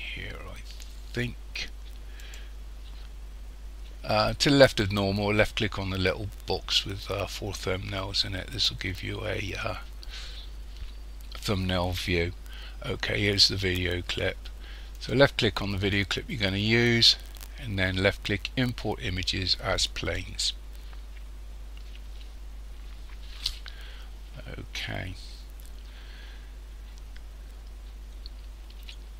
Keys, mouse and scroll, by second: 21.3 click, 24.7-25.0 scroll up 3.